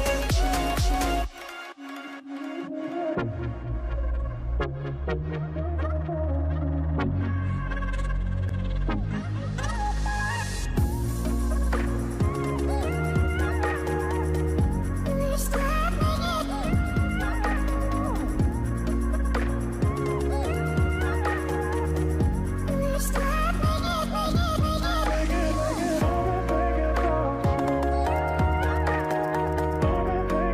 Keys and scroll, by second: 2.7 v, 5.4 shift+Left, 15.9 shift+Left, 16.2 shift+Left, 19.5 shift+Left, 27.1 ctrl+g.